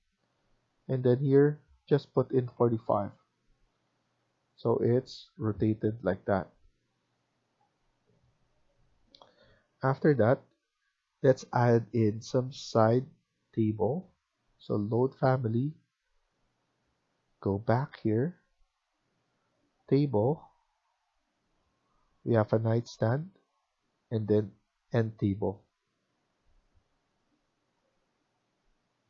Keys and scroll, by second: 2.2-2.9 typing, 3.6 Escape, 3.8 Escape, 6.9 Escape.